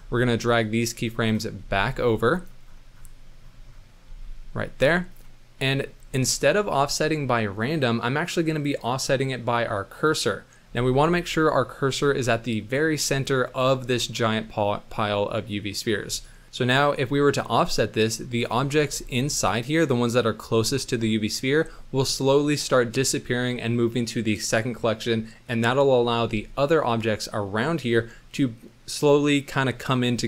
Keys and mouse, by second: 1.0 click, 1.6 g, 4.1 g, 5.6 click, 8.7-10.1 drag, 11.6-12.1 drag, 12.4-13.3 middle drag, 14.4-15.9 middle drag, 16.3 middle drag, 18.6 shift+middle drag, 19.6 middle click, 21.3 middle drag.